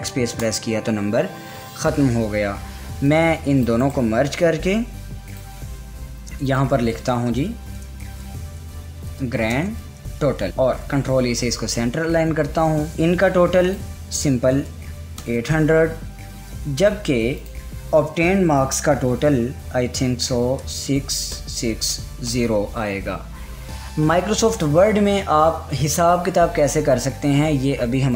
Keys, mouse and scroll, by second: 3.6 click, 4.4 right click, 5.8 click, 8.0-10.5 typing, 11.4 ctrl+e, 12.9 click, 15.2-15.9 typing, 17.9 click, 21.1-22.8 typing.